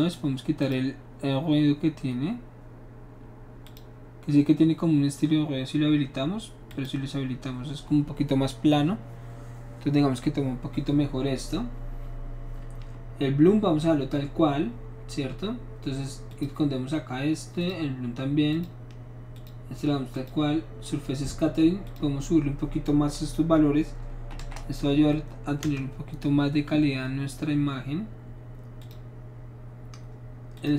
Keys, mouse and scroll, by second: 0.6 click, 3.6 click, 6.7 click, 13.2-14.3 middle drag, 16.3 click, 17.6 click, 18.5 click, 19.3 click, 20.1 click, 21.9 click, 24.4 KP_2, 24.4 KP_0, 25.6 Return, 28.8 click, 30.5 click.